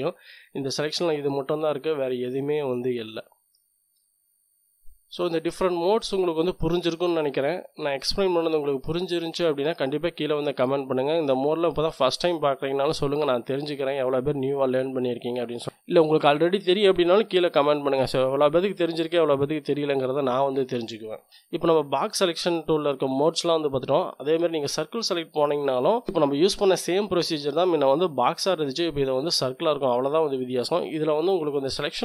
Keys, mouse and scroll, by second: 0.0-4.2 drag, 4.8-7.0 drag, 24.3-25.9 drag.